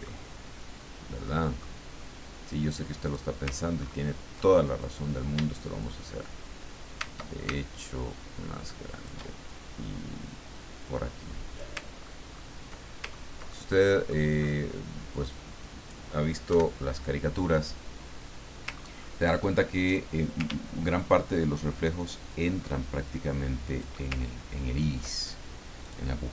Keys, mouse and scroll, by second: 1.2 middle click, 3.1 click, 3.8-4.2 ctrl+scroll up 1, 4.8 ctrl+click, 5.8-9.4 shift+drag, 9.5-11.6 ctrl+shift+drag, 11.9-12.6 ctrl+scroll down 4, 13.1 ctrl+scroll down 2, 13.5 ctrl+middle click, 15.2 click, 16.5 Delete, 18.8-19.2 ctrl+scroll up 2, 19.8 ctrl+click, 20.9-23.9 ctrl+shift+drag, 24.5-24.8 ctrl+scroll down 2, 25.8 click.